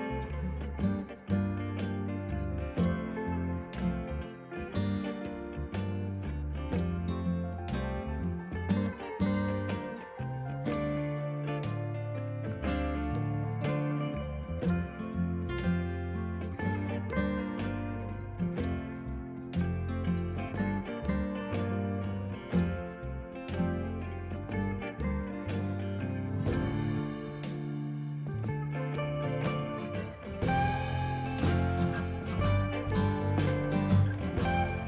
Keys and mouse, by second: 0.4 Return, 0.7 click, 1.0 Delete, 1.1 click, 1.3 a, 1.4 click, 1.7 a, 1.8 click, 2.6 click, 4.8 a, 5.0 click, 5.9 Escape, 6.1 click, 6.3 s, 6.8 click, 8.2 click, 8.6 click, 9.9 s, 10.2 click, 11.2 click, 11.6 shift+click, 11.8 click, 12.8 a, 13.0 ctrl+click, 13.2 a, 13.3 click, 13.7 click, 16.0 click, 16.3 ctrl+shift+x, 16.5 click, 17.4 click, 18.8 v, 18.8 click, 19.4 ctrl+click, 19.5 right click, 19.9 click, 20.2 right click, 21.2 click, 23.7 click, 24.1 ctrl+z, 24.5 click, 24.8 a, 25.0 click, 25.2 ctrl+click, 28.5 s, 28.6 click, 29.0 Escape, 29.5 click, 31.4 Right, 31.7 click, 32.1 KP_9, 32.1 Return, 32.6 click.